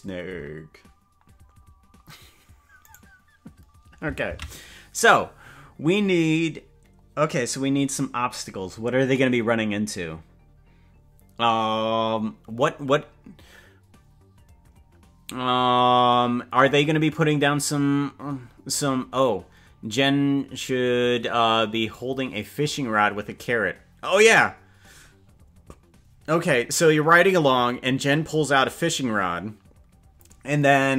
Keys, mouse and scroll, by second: 3.0 right click, 5.8 ctrl+s.